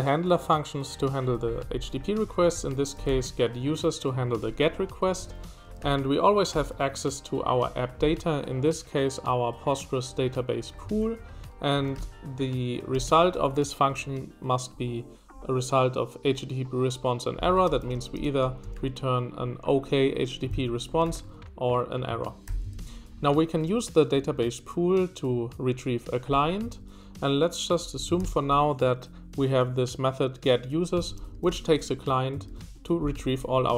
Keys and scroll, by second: 2.0-3.6 typing, 5.0 Escape, 5.0-6.6 typing, 10.6-12.9 typing, 17.4-19.2 typing, 20.4-22.4 typing, 26.6 Escape, 27.5-28.7 typing, 30.9 Escape, 31.2 b, 31.3 b, 31.5 b, 31.6 b.